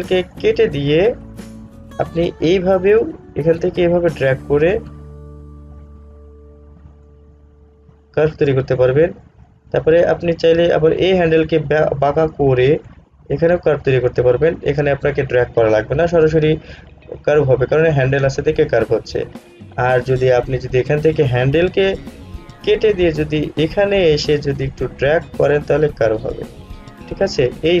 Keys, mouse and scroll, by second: 0.5 click, 3.1-9.7 drag, 10.0-11.3 drag, 11.3-15.3 drag, 20.5 click, 20.7 z, 22.7 click, 25.0-27.8 drag.